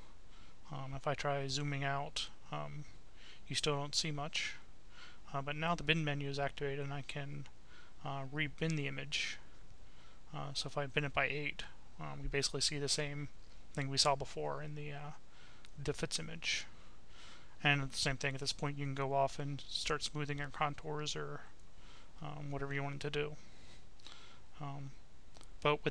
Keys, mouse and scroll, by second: 0.0 click, 4.3 click, 5.8 click, 9.3 click, 10.1-13.7 right drag, 16.6 click, 17.8 click, 19.9 click, 21.0 click, 21.7-22.8 right drag, 23.1-24.7 right drag, 24.8 click, 25.5 click.